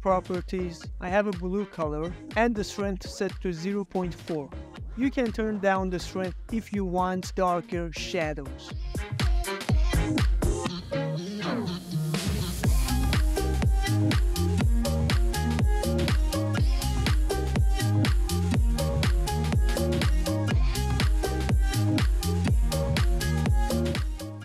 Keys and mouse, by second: 0.2 shift+middle drag, 0.6 ctrl+middle drag, 1.0-1.4 middle drag, 1.4 shift+middle drag, 1.7 shift+drag, 2.0-2.4 ctrl+middle drag, 2.6-3.7 shift+middle drag, 4.7 click, 5.2 click, 6.2-7.8 drag, 8.1 click, 9.0 click, 9.7 click, 10.1 click, 10.4 click, 11.8 KP_0, 12.3 ctrl+middle click, 12.6 click, 12.9 click, 13.2 click, 14.1 ctrl+middle click, 14.6 click, 15.6 click, 16.3 Right, 16.8 click, 17.5 click, 18.2 click, 18.4 BackSpace, 19.0 ctrl+middle click, 19.2 ctrl+middle click, 19.3 shift+middle click, 19.4 middle click, 19.7 middle drag, 20.0 ctrl+middle click, 20.5 middle drag, 21.0 z, 21.7 middle drag, 22.0 middle click, 22.4 shift+middle drag, 22.9 shift+middle click, 23.1 shift+middle click, 23.3 click, 23.3 middle drag, 23.5 ctrl+middle click, 24.0 click.